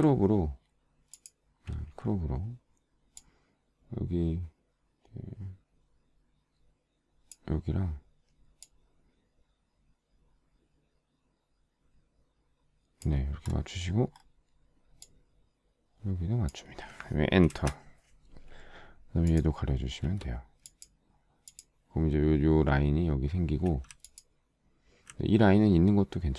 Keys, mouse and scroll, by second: 17.9 Return, 20.6 z, 24.5 alt+click.